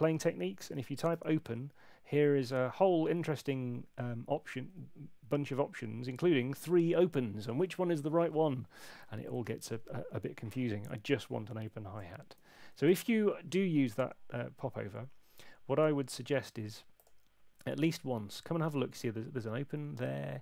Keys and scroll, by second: 0.5-1.6 typing, 9.0 Down, 12.3 Escape.